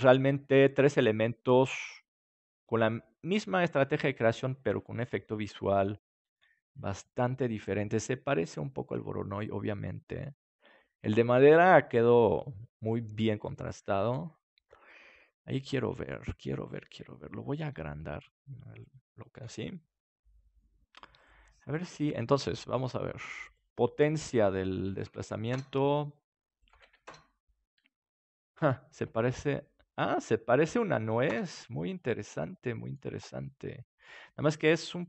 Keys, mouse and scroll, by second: 17.9 s, 18.9-20.9 drag, 19.3 ctrl+s, 22.0-29.7 drag, 32.2-34.9 middle drag, 34.9-35.0 drag.